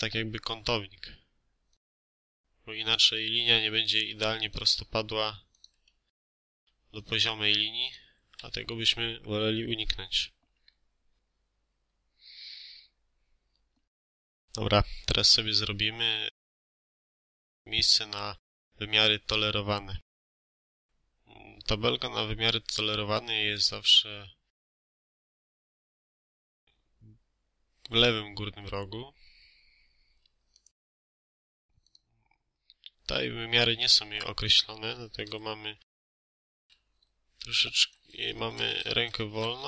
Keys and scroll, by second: 0.4 space, 3.0 Escape, 3.4 space, 5.8 Escape, 6.3 space, 8.3 Escape, 36.4 6, 36.5 4, 38.2-39.6 typing, 39.3 Caps_Lock.